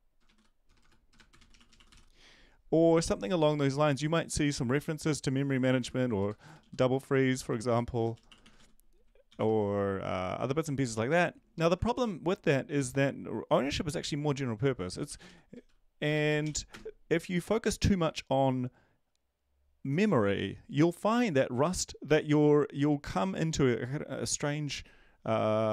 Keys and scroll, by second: 0.0-2.4 typing, 3.5 ctrl+`, 7.0-9.4 typing, 10.5 ctrl+shift+Left, 10.8 ctrl+shift+Left, 11.0 ctrl+shift+Left, 11.9 ctrl+x, 15.1-16.9 typing.